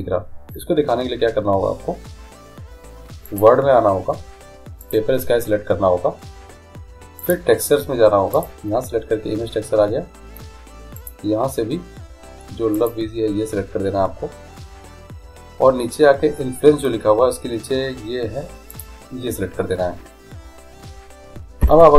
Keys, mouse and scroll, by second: 3.5-6.9 drag, 7.4-10.4 drag, 10.5-11.1 scroll down 1, 11.1-13.1 drag, 18.9-20.8 drag.